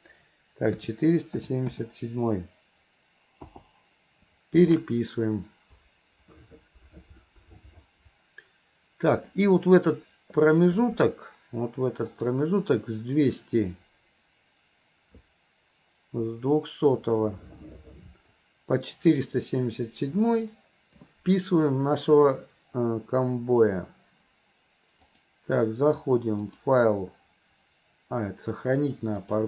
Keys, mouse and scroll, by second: 12.2 click, 25.1-26.3 drag, 28.1 click.